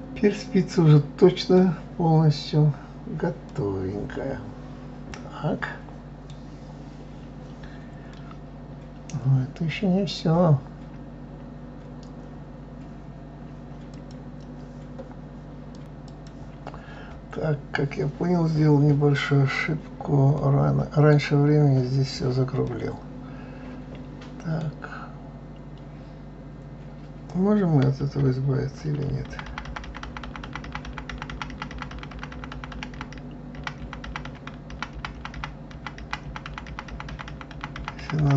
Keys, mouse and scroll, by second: 2.0-3.5 scroll down 3, 3.5-6.5 middle drag, 8.1-11.2 middle drag, 11.2-11.9 scroll up 2, 11.9-12.3 scroll down 3, 12.3-14.3 scroll up 2, 14.3-15.6 scroll up 1, 17.1-17.6 scroll down 2, 17.6-18.6 scroll up 1, 18.6-19.3 scroll up 6, 19.3-20.0 scroll down 4, 20.0-25.3 middle drag, 28.7-36.6 ctrl+z.